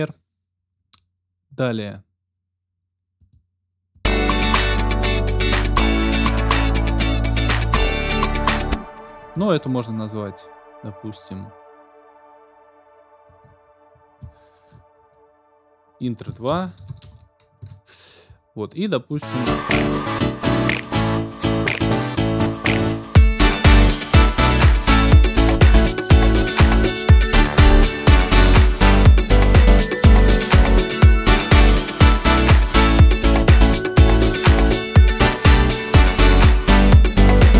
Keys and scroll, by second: 8.5 space, 9.3 ctrl+space, 16.0-17.6 typing.